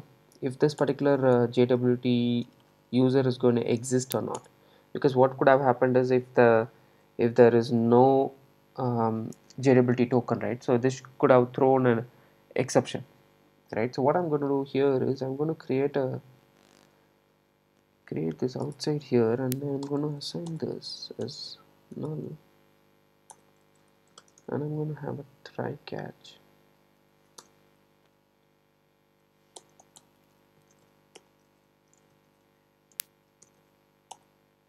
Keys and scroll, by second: 4.4 Return, 7.7 Return, 17.6 super+c, 31.2 Return.